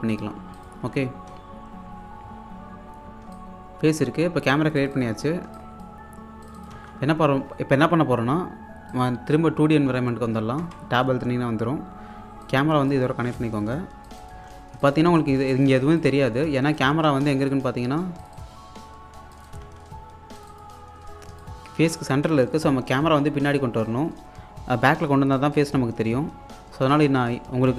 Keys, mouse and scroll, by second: 0.8 s, 3.1 s, 3.1 alt+scroll down 1, 3.4 alt+click, 5.2 scroll down 1, 5.5 click, 6.7 1, 8.9 click, 10.6 Tab, 12.4 click, 14.3 1, 14.7 scroll down 1, 14.9 alt+click, 16.9 Tab, 17.3 alt+click, 19.7 1, 20.4 click, 21.1-21.4 scroll up 1, 21.4-23.2 alt+drag, 26.8 click, 27.0 Tab, 27.5-27.7 typing.